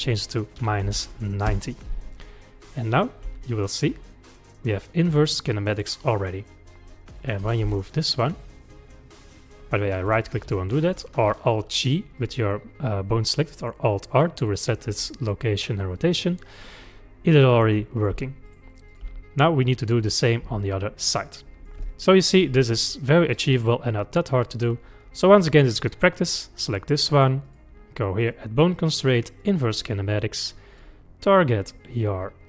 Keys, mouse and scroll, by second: 3.3 g, 6.8-7.4 middle drag, 7.4 click, 7.7 g, 12.2 click, 13.4-18.0 middle drag, 18.0 click, 18.1 g, 18.9 click, 19.1 g, 20.6-23.0 middle drag, 23.0 scroll down 1, 23.3-26.2 middle drag, 26.2 click, 27.5 click, 28.2-30.8 drag.